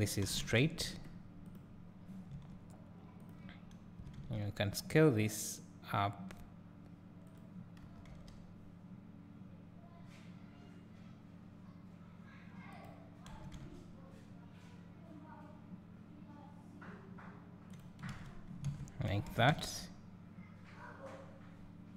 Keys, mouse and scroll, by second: 0.2 s, 1.5 click, 2.5 Tab, 4.0 s, 7.4 click, 7.8 g, 13.3 s, 18.7 alt+a, 19.6 `, 20.2 `.